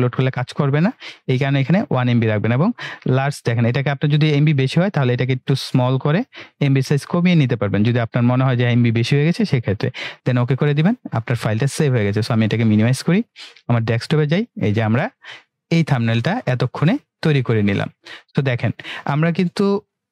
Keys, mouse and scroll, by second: 3.1-10.2 drag, 13.0 click.